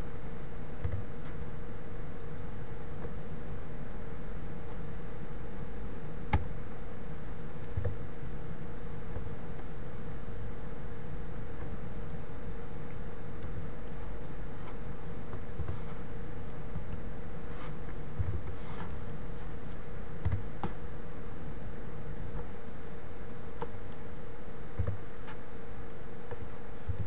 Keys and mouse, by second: 1.7 a, 8.4 s, 10.5-11.5 drag, 15.7 KP_7, 17.4 u, 20.9 a, 25.4 s.